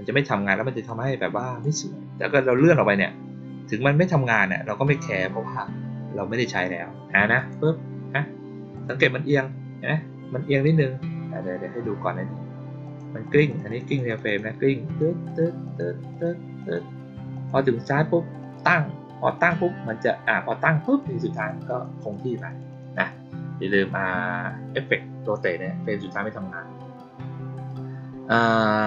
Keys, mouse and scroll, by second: 0.8 click, 7.3 click, 8.7 click, 12.8 click, 13.2 click, 13.4 click, 13.6 click, 13.8 click, 14.0 click, 14.2 click, 14.8 click, 15.2 click, 15.6 click, 16.0 click, 16.5 click, 17.3 click, 18.3 click, 19.3 click, 20.8 click, 21.3 click, 21.6 click, 21.9 click, 22.2 click, 22.4 click, 22.6 click, 22.9 click.